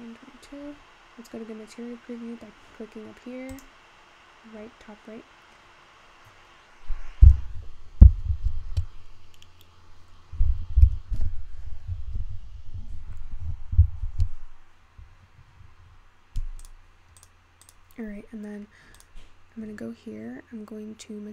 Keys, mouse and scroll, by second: 0.7-1.2 scroll up 1, 1.2-3.0 scroll down 2, 7.0 click, 17.2 drag, 17.7 click, 18.0-18.7 scroll down 3, 18.7 scroll up 5, 19.1 click.